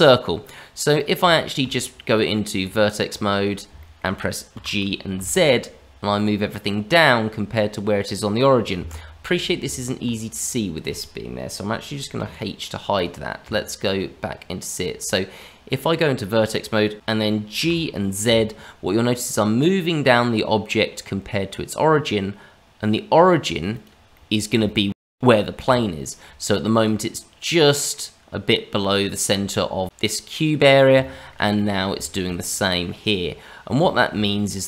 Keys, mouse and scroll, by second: 0.9 middle click, 1.3 shift+middle click, 2.1 middle click, 2.5 Tab, 3.4 scroll down 1, 3.7 shift+middle click, 4.5 g, 9.6 Tab, 10.4 click, 12.1 h, 12.9 click, 13.4 Tab, 16.9 click, 16.9 g, 17.5 g, 24.1 middle click, 24.6 shift+middle click, 24.9 scroll up 2, 25.7 shift+middle click, 27.5 middle click, 30.9 shift+middle click, 31.5 middle click, 31.9 shift+middle click, 32.4 middle click, 34.1 shift+middle click, 34.4 scroll down 1.